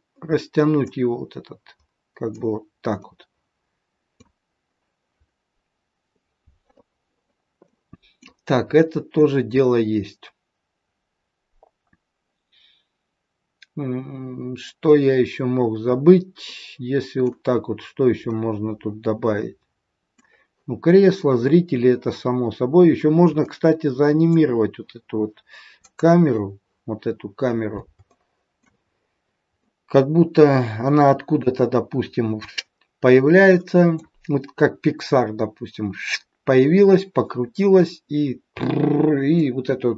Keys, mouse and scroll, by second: 0.8 click, 2.9 middle click, 7.6 middle click, 8.7 middle click, 9.7-11.8 scroll down 2, 13.9-15.4 scroll up 3, 15.8-16.4 scroll down 1, 16.5 middle click, 18.2 middle click, 20.1 middle click, 22.8 scroll down 2, 23.3 middle click, 25.9 click, 27.0-27.9 scroll up 2, 27.9 scroll up 2, 28.1 shift+middle click, 28.9 scroll up 3, 29.6 middle click, 31.5-31.9 scroll down 3, 33.4 middle click, 34.1 scroll down 2, 39.4 middle click.